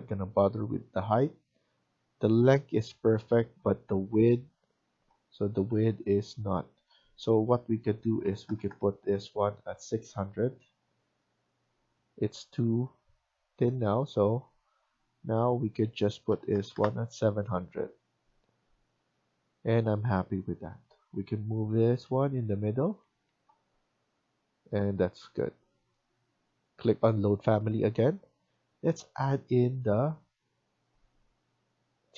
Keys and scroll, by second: 8.3-9.1 typing, 16.5 typing, 19.6 Escape, 21.3 Right, 21.5 Right, 21.9 Down, 22.2 Down, 22.9 Escape.